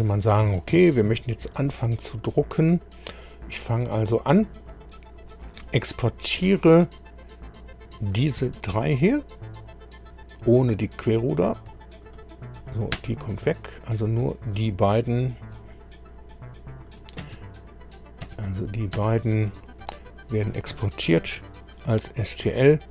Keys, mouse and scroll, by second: 3.3 click, 6.1 ctrl+click, 7.8 ctrl+click, 8.4 ctrl+space, 12.0 ctrl+click, 12.9 ctrl+space, 13.7 click, 14.5 shift+click, 16.9 click, 17.2 space, 17.9 click, 18.2 space, 18.6 click, 18.9 space, 19.5 click, 20.1 shift+click, 21.3 ctrl+e.